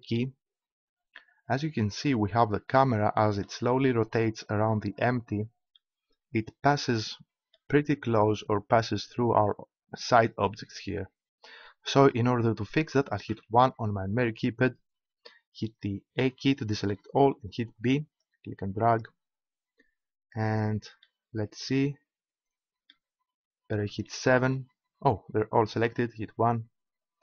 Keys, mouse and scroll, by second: 2.7-4.0 middle drag, 9.4-13.3 middle drag, 13.3 KP_1, 16.2 a, 17.6 b, 23.8 KP_7, 26.2 KP_1.